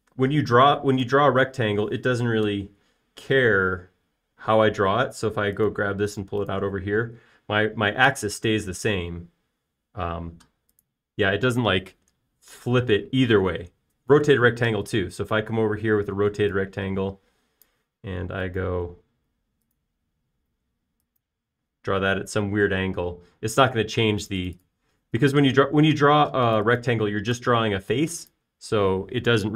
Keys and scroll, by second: 2.2 r, 8.1 space, 22.7 space, 26.4 BackSpace, 28.3 BackSpace.